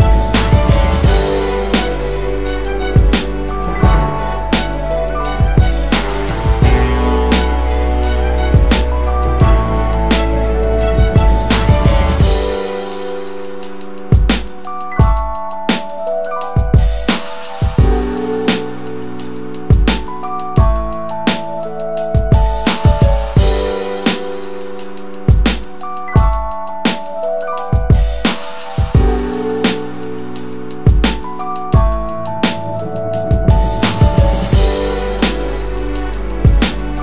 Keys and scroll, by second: 19.8 ctrl+-, 21.7-22.5 typing.